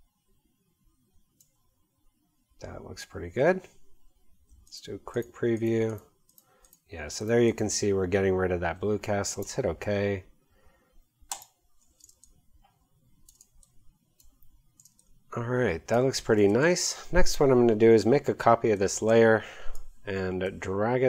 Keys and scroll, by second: 12.0 space, 16.7 v.